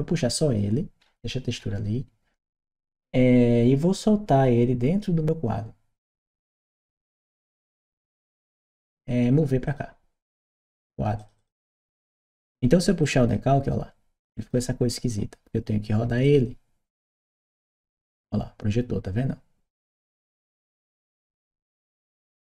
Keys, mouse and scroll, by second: 0.8-1.3 scroll up 1, 1.3 scroll up 1, 4.6 scroll up 1, 5.8-7.5 drag, 9.4 click, 10.9 click, 11.1 click, 12.8-14.3 drag, 16.0 click, 17.0-21.1 drag, 21.5 right click.